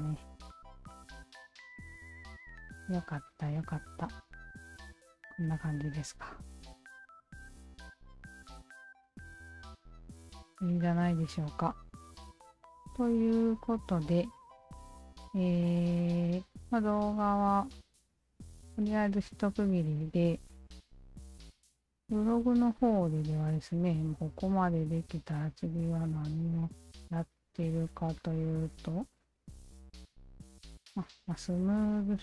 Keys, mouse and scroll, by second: 0.1 alt+click, 1.2 alt+click, 3.1 alt+click, 3.8 alt+click, 4.5-5.1 alt+drag, 5.5-5.9 alt+middle drag, 5.9-6.4 alt+drag, 6.6 alt+drag, 7.0 alt+drag, 7.3 alt+drag, 7.6-9.3 alt+drag, 9.6-12.0 alt+drag, 13.3 alt+click, 14.6 alt+drag, 15.1-16.4 alt+drag, 16.7 alt+middle click, 17.0-18.5 alt+drag, 18.7 alt+middle click, 19.0-20.1 alt+drag, 21.8 alt+click, 25.3-26.9 scroll down 4, 26.9-27.2 scroll down 4, 27.2 scroll up 1, 27.4-27.8 scroll down 1, 27.8-28.1 scroll up 1, 28.2-29.2 scroll down 3, 29.2-30.2 scroll down 7, 30.2-30.8 scroll down 4, 30.8-32.2 scroll up 1.